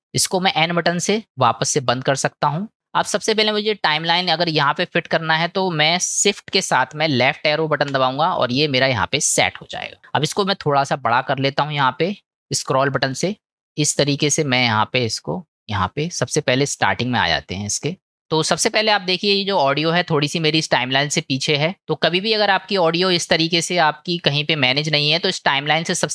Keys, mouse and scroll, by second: 1.7 n, 3.3-4.3 drag, 7.9 shift+Left, 13.2 click, 14.7 middle click, 17.2 middle click, 18.3 middle click, 20.5 middle click, 21.6 middle click, 23.2-25.3 drag.